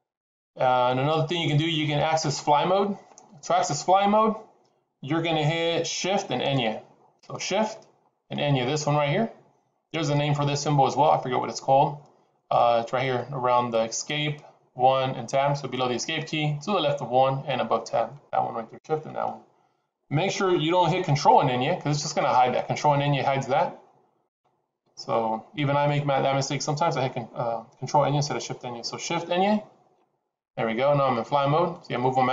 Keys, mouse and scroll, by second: 23.3 ctrl+`, 24.2 ctrl+`, 29.6 shift+`.